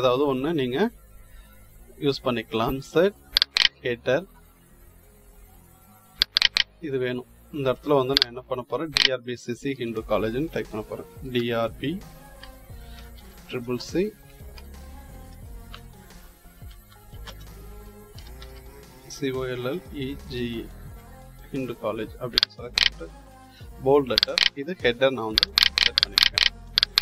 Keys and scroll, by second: 9.6 Delete, 10.8-18.8 typing, 20.0-20.8 typing, 23.4 ctrl+b.